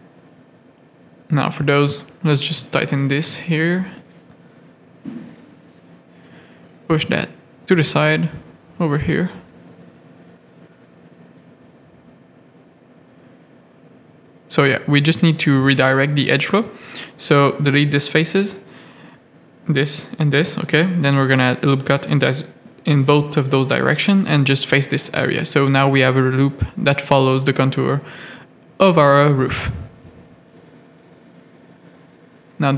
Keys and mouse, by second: 0.3 ctrl+click, 0.5 middle click, 0.9 g, 2.9 a, 3.8 click, 4.6 ctrl+click, 5.1 g, 7.9 middle click, 8.5 z, 9.3 g, 10.6 a, 10.9 middle click, 11.6-13.8 typing, 12.3 click, 13.4 click, 15.1 f, 15.2 a, 16.2 shift+middle click, 16.5-19.7 typing, 17.9 middle click, 18.5 click, 19.8 middle click, 20.2 ctrl+r, 21.1-25.7 typing, 21.4 ctrl+r, 24.5 click, 26.9 middle click, 27.4 Tab, 27.9 z, 28.5 click, 29.5 Tab, 29.6 middle click, 31.4 click, 32.1 g.